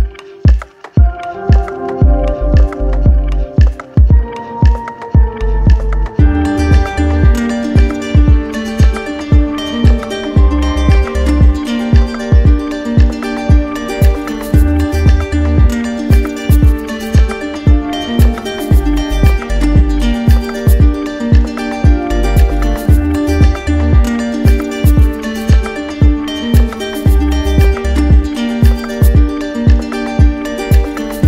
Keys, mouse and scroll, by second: 0.5 click, 1.3 click, 2.0 right click, 2.9 shift+click, 3.7 shift+click, 4.0-5.3 right drag, 5.3 click, 6.3 shift+right click, 8.3 right click, 9.9 alt+click, 11.5 alt+click, 13.2 alt+click, 13.9 alt+click, 16.5 alt+click, 19.4 shift+click, 19.6 shift+click, 20.0 right click, 21.4 click, 22.6 right click, 23.7 right click, 25.5-26.2 scroll, 26.4-27.4 scroll, 27.5 right click, 29.0 click, 30.7 right click.